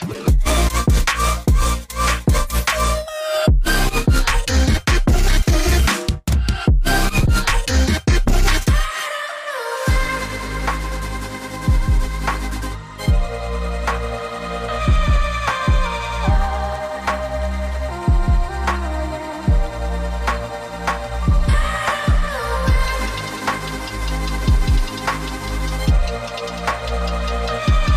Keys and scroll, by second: 3.9-4.3 typing, 4.2 Tab, 12.8 shift+Tab, 14.5 typing, 16.2 Tab, 18.1-19.5 typing, 22.6 shift+Tab, 22.9 shift+Tab, 23.0 shift+Tab, 25.0-26.3 typing.